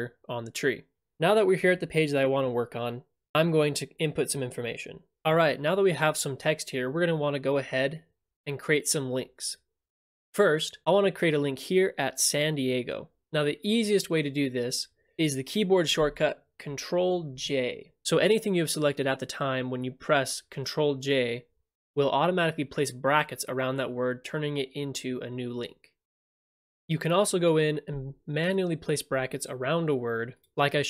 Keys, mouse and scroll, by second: 10.8 click, 11.2 click, 16.6 click, 17.3 ctrl+j, 28.5-29.6 drag, 29.1 [, 30.4 click.